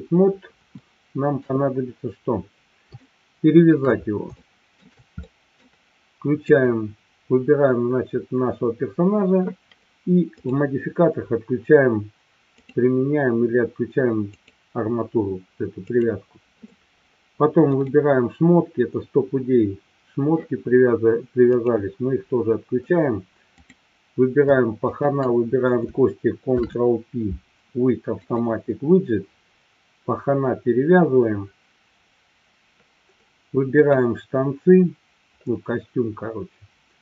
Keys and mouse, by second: 0.9-1.5 shift+middle drag, 3.1-3.6 shift+middle drag, 4.3-4.7 shift+middle drag, 5.2-5.6 middle drag, 6.4 click, 10.3 click, 12.4 click, 16.0 click, 17.7 click, 21.6 click, 23.6 click, 24.8-25.2 shift+drag, 26.6 ctrl+p, 33.7 click.